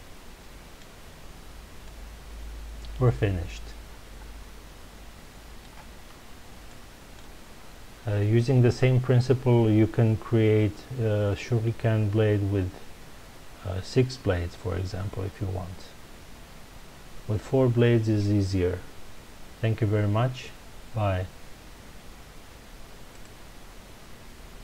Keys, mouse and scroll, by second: 1.2-1.8 scroll down 2, 1.8-5.0 middle drag, 6.7-9.7 shift+middle drag.